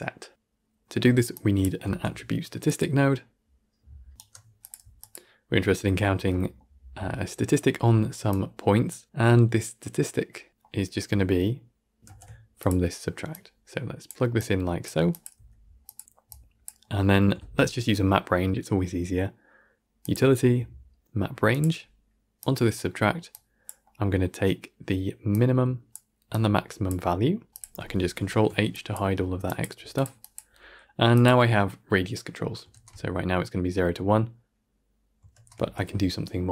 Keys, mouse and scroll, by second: 4.1-4.5 right drag, 4.5 click, 8.2-11.7 drag, 11.9 ctrl+x, 12.5-13.9 drag, 14.3 click, 16.2-21.5 drag, 23.2-25.8 drag, 26.2-26.8 drag, 27.5-28.1 drag, 28.1 ctrl+h, 28.8 click, 29.3 drag, 30.1 click, 32.6 shift+space, 35.2 shift+space.